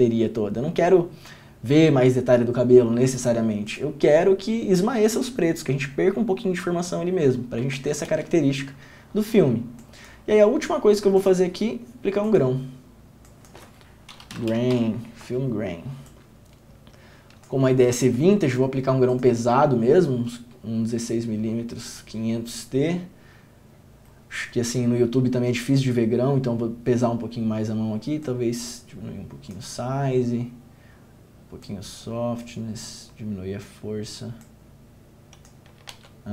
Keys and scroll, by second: 7.9 ctrl+d, 8.2 ctrl+d, 14.4-15.4 typing, 35.9 n, 36.1 ctrl+d.